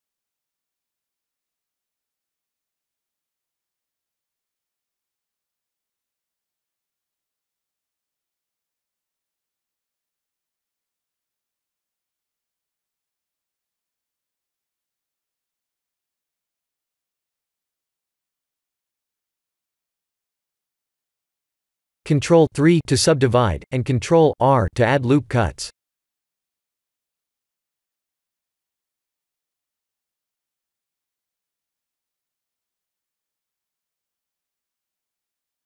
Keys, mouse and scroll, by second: 1.5 ctrl+z, 2.5 click, 4.9 click, 5.2 b, 7.0 click, 9.3 click, 9.5 Tab, 12.8 click, 13.6 click, 18.6 click, 19.2 click, 19.6 click, 20.0 click, 20.8 shift+z, 21.9 Tab, 22.3 Tab, 22.9 ctrl+3, 24.3 Tab, 25.7 ctrl+r, 28.5 ctrl+r, 30.4 middle click, 31.6 ctrl+r, 33.0 Tab, 33.4 middle click, 33.7 middle click, 33.9-34.5 middle click, 34.2 middle click, 34.2 middle click, 34.9 middle click, 35.6 middle click.